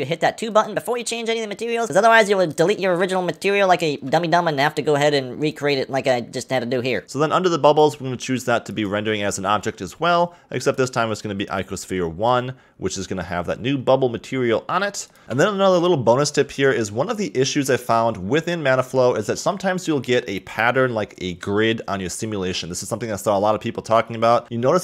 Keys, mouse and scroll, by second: 0.7-1.8 drag, 1.8 shift+a, 4.1 shift+a, 7.0 click, 7.8-13.7 drag, 15.2-18.2 shift+middle drag, 18.7-21.8 shift+middle drag, 22.3-23.2 scroll up 3, 23.2-24.4 shift+middle drag, 24.4-24.8 scroll up 5.